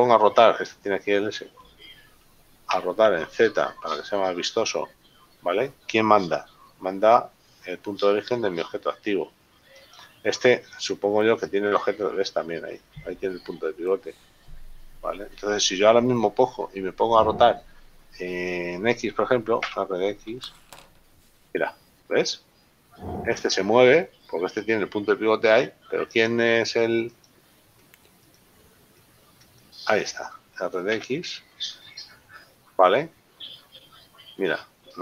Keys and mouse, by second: 2.9 r, 4.2 z, 9.9 right click, 19.6 r, 20.6 x, 26.3 right click, 27.6 shift+right click, 28.3 right click, 29.0 right click, 29.6 shift+right click, 31.0 r, 32.6 x.